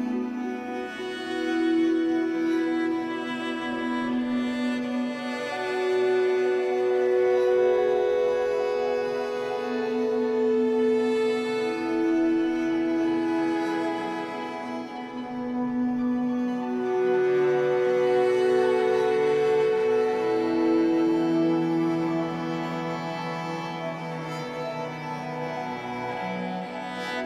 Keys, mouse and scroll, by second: 1.2 click, 1.6 g, 2.7 click, 3.0 b, 3.4 g, 4.1 ctrl+b, 5.8 click, 6.1 b, 6.9 ctrl+b, 7.9 g, 8.6 click, 8.9 scroll up 1, 9.2 g, 10.0 click, 11.4 click, 11.8 b, 12.3 ctrl+r, 12.8-15.2 typing, 13.6 click, 16.4 click, 16.6 b, 17.1 ctrl+r, 17.6-21.8 typing, 18.2 click, 20.4 click, 22.2 Tab, 22.4-22.9 scroll down 5, 22.9 Tab, 22.9 scroll up 3, 23.2 z, 23.4 click, 23.6 b, 24.3 r, 25.3 r, 26.4-27.2 typing.